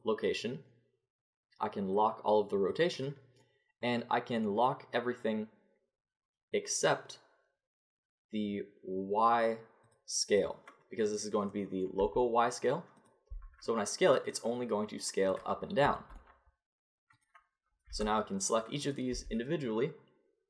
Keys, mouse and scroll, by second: 3.8 middle click, 9.9-13.3 drag, 12.0 s, 13.3 s, 16.0 click, 16.7 click, 17.1-19.1 drag, 17.9 r, 19.1 s.